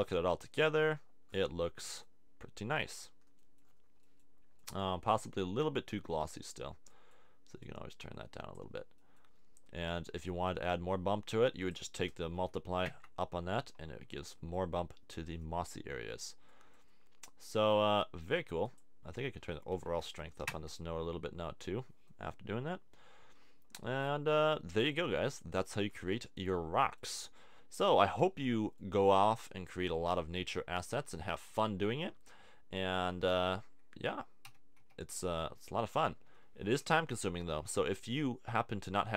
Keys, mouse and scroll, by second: 16.5-18.6 middle drag, 18.6-20.7 drag, 24.0-25.3 middle drag, 34.4 r, 37.0 r.